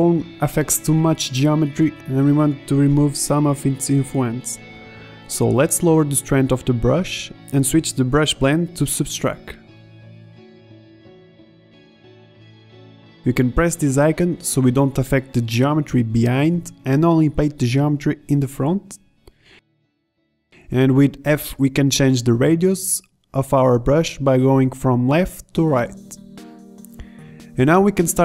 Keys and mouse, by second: 0.2 middle click, 1.2 middle click, 1.7-2.3 middle drag, 6.1-8.8 drag, 8.8-10.8 middle drag, 10.9 middle click, 11.1 z, 12.3 middle drag, 12.6 middle click, 17.9-19.1 drag, 19.2 z, 20.3 middle drag, 20.8 middle drag, 22.2 f.